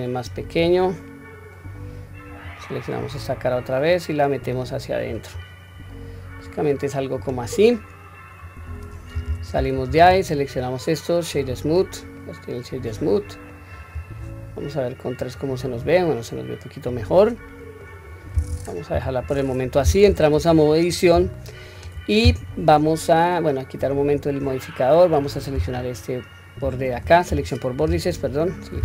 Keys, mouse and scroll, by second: 2.3 click, 3.9 click, 5.4-6.3 middle drag, 6.7 scroll up 2, 7.8-8.1 scroll down 1, 8.4-9.2 scroll down 1, 9.2 Tab, 9.9-11.5 right drag, 12.2-13.5 middle drag, 15.2 click, 16.1-17.8 middle drag, 18.1-18.8 scroll down 1, 18.9 scroll down 1, 18.9 KP_1, 20.1 Tab, 20.5-20.8 scroll up 1, 21.1 scroll up 2, 21.3-21.7 shift+middle drag, 24.0 click, 25.7 alt+click, 27.3 2, 28.1 alt+click.